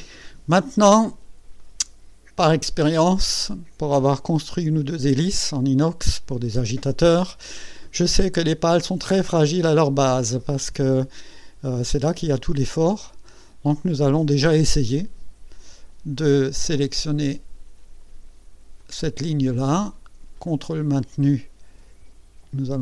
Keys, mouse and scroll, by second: 1.6 click, 2.9-4.0 drag, 4.3-5.8 drag, 7.8 click, 10.4-12.0 drag, 12.8-14.1 drag, 14.3 scroll up 1, 15.3 scroll up 1, 18.8 click, 19.3-22.0 drag.